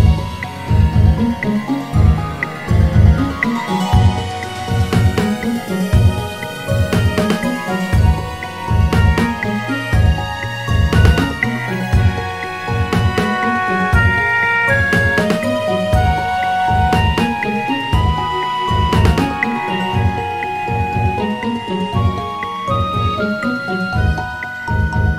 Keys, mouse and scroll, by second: 0.5 click, 5.5 click, 8.1-10.1 drag, 13.7-20.7 drag, 22.3 click.